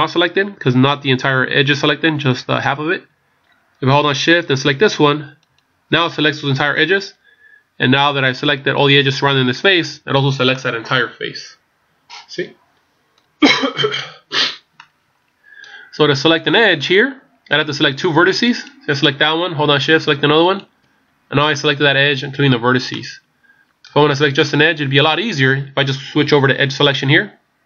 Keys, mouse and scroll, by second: 5.4 shift+right click, 10.5 middle click, 14.7 middle click, 18.5 right click, 20.5 shift+right click, 21.5 middle click, 22.9 middle click, 22.9-23.2 scroll down 1, 24.1 scroll up 1, 24.9 scroll up 1.